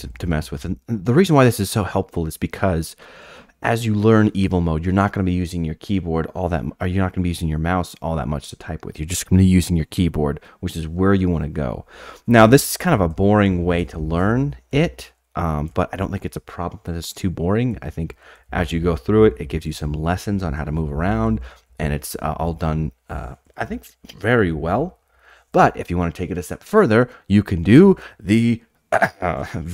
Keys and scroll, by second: 0.0-0.3 typing, 12.3-15.7 typing, 17.7-21.9 typing, 27.7 alt+Tab.